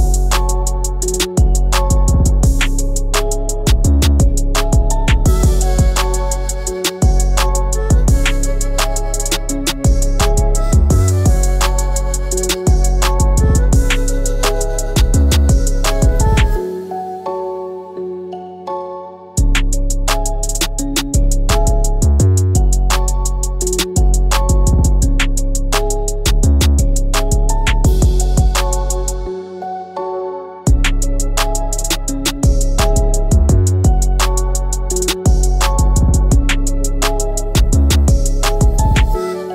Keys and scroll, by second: 26.6 Up, 31.2 Down, 31.4 Down, 31.9 Up, 32.2 Up, 33.3 Up, 33.8 Up, 34.0 Up, 34.2 Up, 35.2 Up, 35.4 Up, 36.0 Up, 36.2 Up, 36.3 Up, 36.5 Up, 36.6 Up.